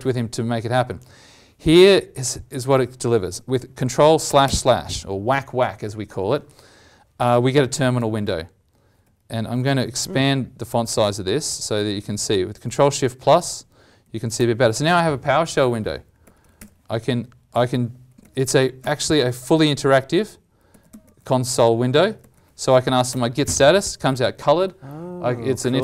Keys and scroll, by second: 0.8 alt+Tab, 2.6 alt+Tab, 4.2 ctrl+\, 4.4 ctrl+\, 8.2 ctrl+shift+=, 9.0 ctrl+shift+=, 12.0 ctrl+shift+=, 12.7 ctrl+shift+=, 14.1 ctrl+shift+=.